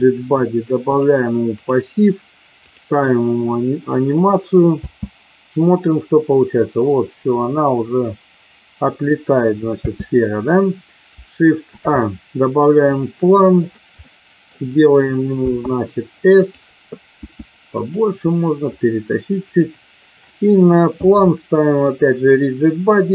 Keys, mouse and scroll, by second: 0.8 click, 2.7 click, 4.7 space, 9.8 space, 11.6 shift+a, 14.0 middle click, 15.4 s, 16.4 click, 17.0 s, 17.7 click, 18.7 click, 21.9 click.